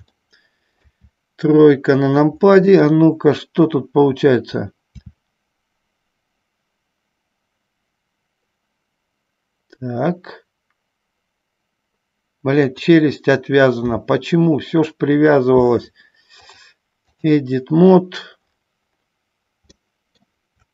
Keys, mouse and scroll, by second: 0.5 middle click, 1.2 KP_3, 2.7-5.7 drag, 5.8 r, 13.9 r, 15.4 click, 16.6 click, 20.0 shift+middle click.